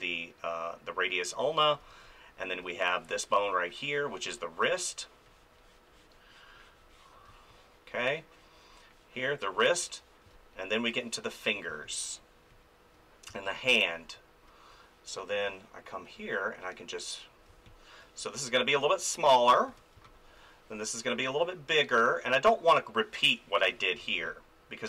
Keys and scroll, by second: 1.8 space, 7.3 space, 10.2 space, 11.7 space, 13.3 space, 17.5 space, 19.7 ctrl+z, 19.9 space, 23.6 ctrl+z, 24.0 space.